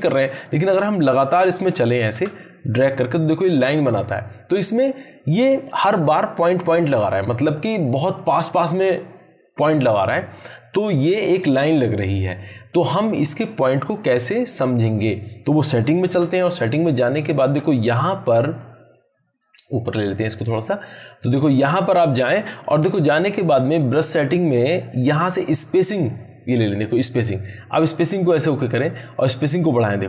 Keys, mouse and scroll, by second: 0.8 ctrl+z, 2.6-3.2 drag, 15.8 ctrl+Num_Lock, 16.0 ctrl+z, 17.0 click, 19.9 click, 28.2-30.0 drag.